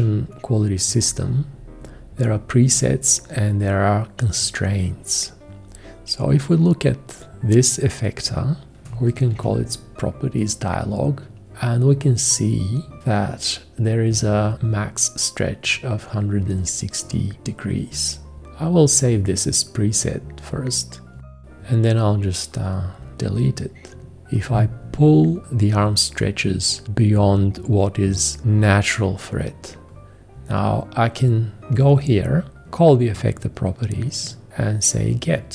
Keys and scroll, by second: 9.3 alt+g, 21.2 typing.